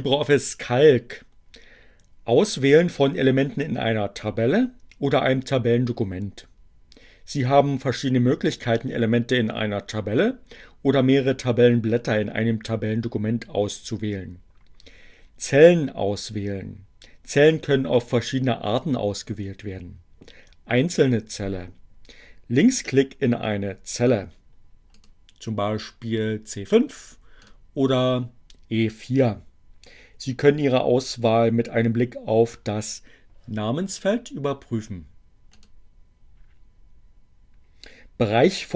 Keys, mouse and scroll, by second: 24.6 click, 26.9 click, 34.8 click.